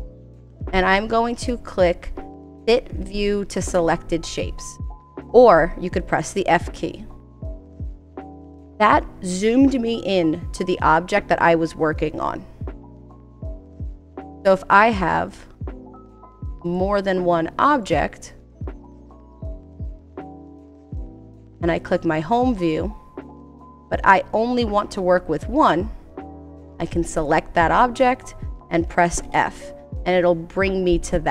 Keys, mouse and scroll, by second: 15.8 click, 17.2 click, 18.3 click, 19.5 click, 20.5 click, 23.1 click.